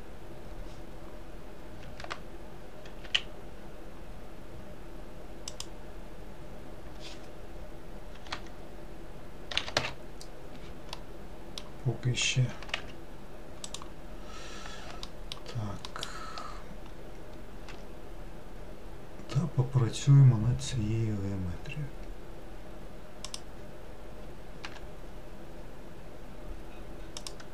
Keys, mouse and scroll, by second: 1.9 s, 8.2 r, 11.0-12.5 middle drag, 12.5 g, 15.1 alt+middle click, 16.0 alt+middle click, 17.8 s, 24.8 g.